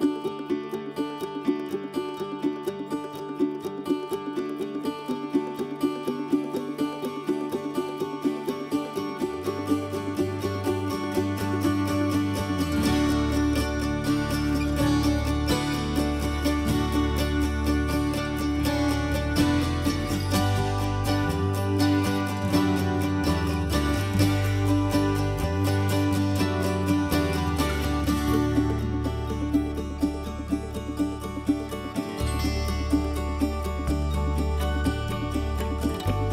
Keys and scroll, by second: 7.2 ctrl+c, 14.2 ctrl+v, 19.7 m, 30.5 ctrl+c.